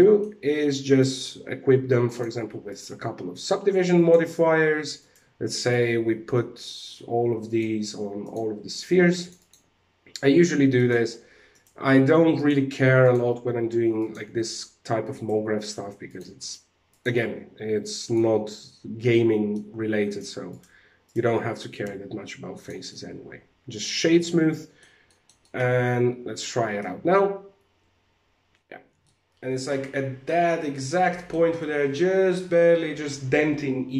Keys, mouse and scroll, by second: 0.4 right click, 1.3 alt+a, 1.6 click, 3.4 click, 4.5 right click, 5.1 right click, 7.0 right click, 7.7 click, 10.3 click, 11.0 right click, 11.8 click, 13.5 click, 14.6 right click, 15.6 click, 17.5 click, 17.9 middle click, 19.6 shift+right click, 21.3 w, 22.4 middle click, 24.6 middle click, 24.9 middle click, 25.3 alt+a, 26.0 middle click, 28.4 alt+a, 28.5 middle click, 30.2 middle click.